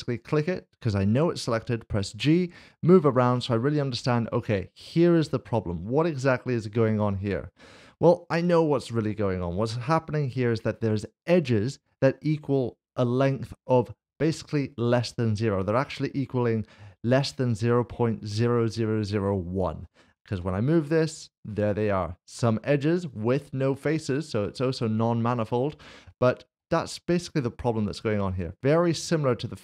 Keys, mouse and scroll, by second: 0.1 click, 2.1 g, 6.7 g, 6.8 click, 8.0 middle click, 8.5 shift+middle click, 10.2 click, 20.3 g, 21.5 click, 22.0 middle click, 27.6 ctrl+z, 28.5 middle click.